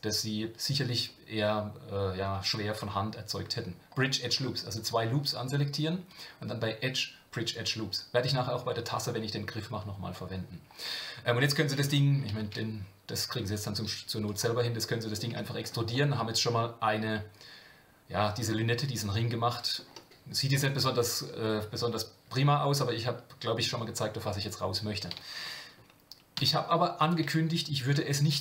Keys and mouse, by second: 6.3-10.8 drag, 14.6 middle click, 15.3 Tab, 15.9-19.8 middle drag.